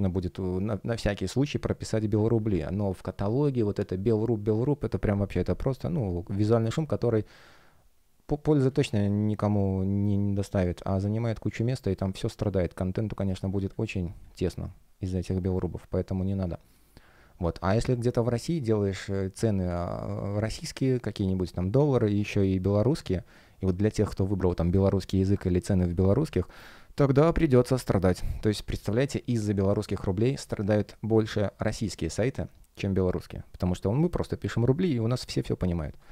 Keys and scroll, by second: 5.9 space, 16.3 space.